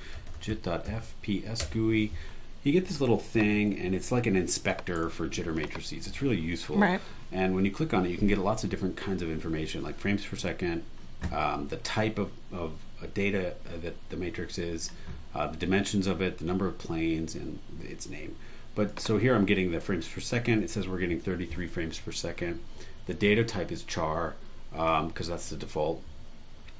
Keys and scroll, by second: 0.0-1.3 typing, 1.6 Return, 4.9 super+e.